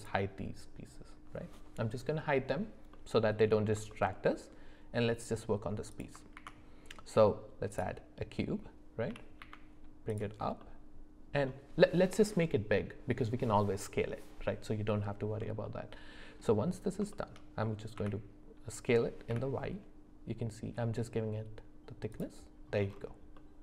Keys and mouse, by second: 2.9 middle click, 3.9 shift+middle click, 6.3 shift+a, 9.1 g, 10.6 middle click, 15.6 middle click, 17.1 shift+middle click, 18.0 s, 23.3-23.6 middle drag.